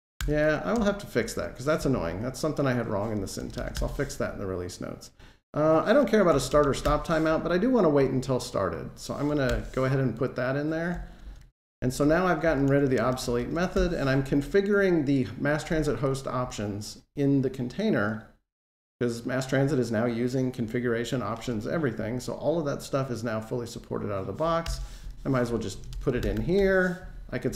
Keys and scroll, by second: 0.0 alt+super+Return, 5.6 Delete, 9.3 alt+super+Return, 11.2 alt+super+Right, 13.4 super+c, 24.6 super+v.